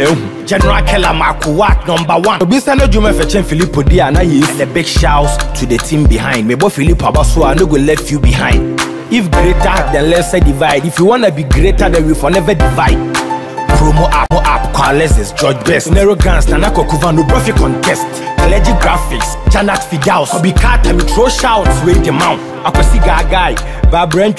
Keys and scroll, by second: 8.4 Escape.